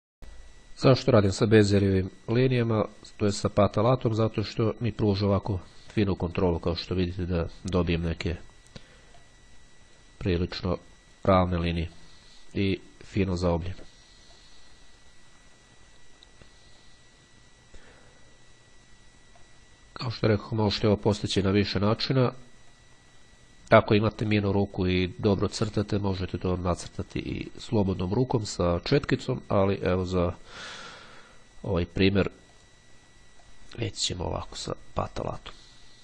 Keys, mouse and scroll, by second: 2.1-5.7 drag, 6.4-7.0 scroll up 1, 7.6-8.2 scroll down 1, 10.6-11.8 drag, 12.0-13.9 drag, 14.5-17.5 drag, 19.5-20.8 drag, 22.0-23.4 drag, 24.0-26.4 drag, 26.6-29.2 drag, 29.6-30.0 scroll down 2, 30.0-30.5 scroll up 2, 32.6 click, 33.5-36.0 drag.